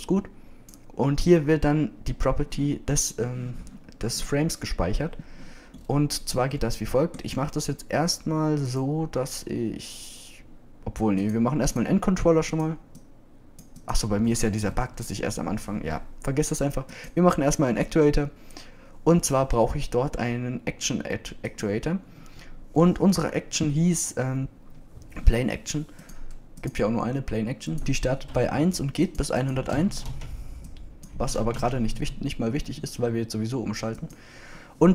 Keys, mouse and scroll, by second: 23.8-24.1 drag, 24.1-25.8 middle drag.